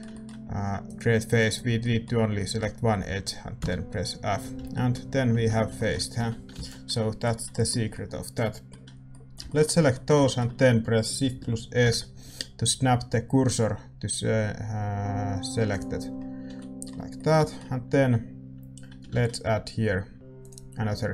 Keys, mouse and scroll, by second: 0.8-4.2 drag, 4.5 a, 5.3 Tab, 6.1 a, 6.8 ctrl+s, 8.8-15.7 right drag, 9.0-15.7 middle drag, 16.1-20.4 middle drag, 16.4 a, 20.4 shift+a.